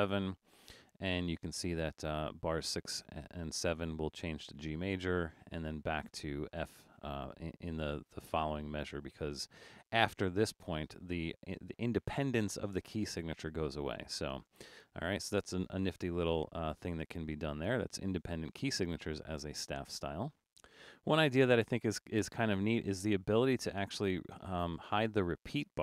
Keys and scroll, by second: 16.9 BackSpace, 20.7 super+-, 21.2 super+-.